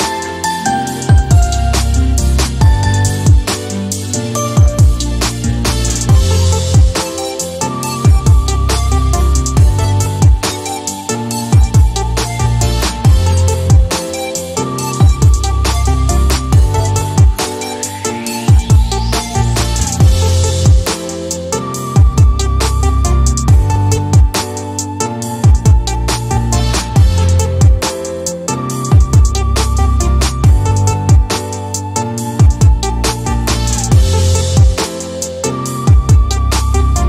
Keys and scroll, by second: 0.0-3.1 typing, 9.3-12.3 typing, 12.5 Return, 16.5-16.9 typing, 19.1-20.3 typing, 20.5 Return, 22.7-25.3 typing, 26.4-27.7 typing, 29.9-31.4 typing, 33.6 x, 35.0-36.1 typing.